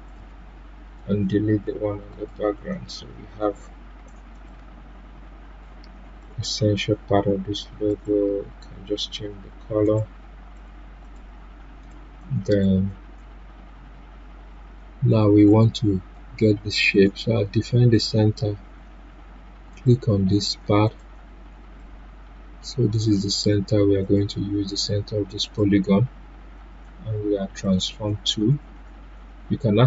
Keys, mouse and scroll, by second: 1.0 Delete, 2.1 click, 9.8 right click, 10.5 click, 11.8 right click, 12.4 click, 15.4 click, 15.5-24.0 drag.